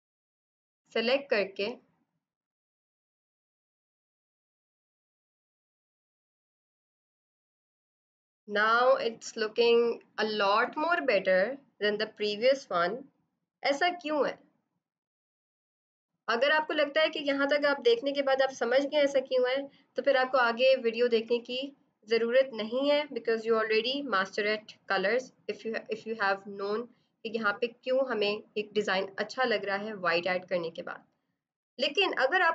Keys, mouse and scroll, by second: 1.1 click, 1.6 click, 2.1 click, 2.5 click, 2.7 click, 2.9 click, 3.6 click, 7.3 ctrl+d.